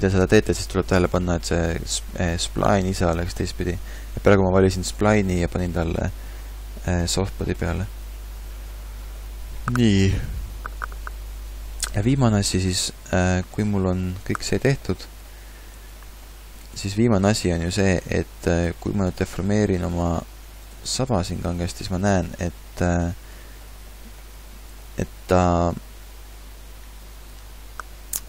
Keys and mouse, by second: 18.7 g, 19.6 r, 21.0 s, 27.2-28.2 middle drag.